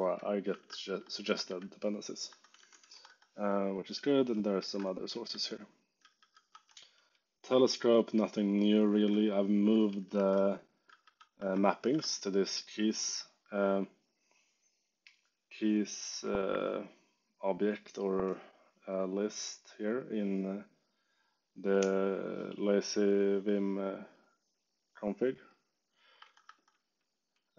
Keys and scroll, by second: 0.0-6.6 typing, 0.8 Escape, 2.2 Escape, 6.4 Escape, 7.7-10.8 typing, 10.1 alt+4, 11.3 Escape, 11.8 shift+v, 12.1 j, 26.1 Escape, 26.6 j.